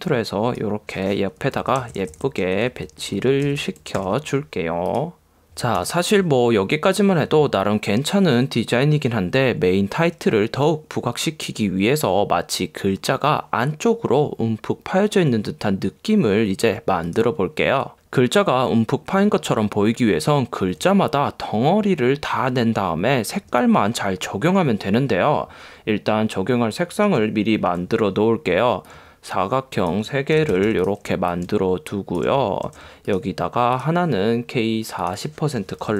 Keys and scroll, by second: 1.6 Down, 27.8 m, 30.5 b.